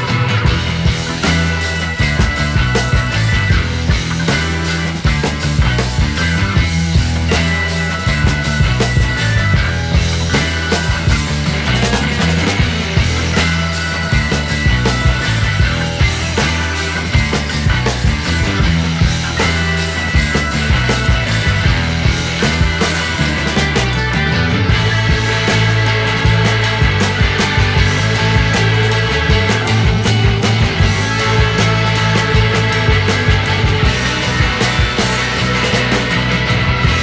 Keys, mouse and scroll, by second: 2.2 click, 16.8 alt+right click, 18.4 alt+right click, 19.5 alt+right click, 20.0 alt+right click, 20.7 alt+right click, 25.7 alt+right click, 29.4 alt+right click, 29.7 alt+right click.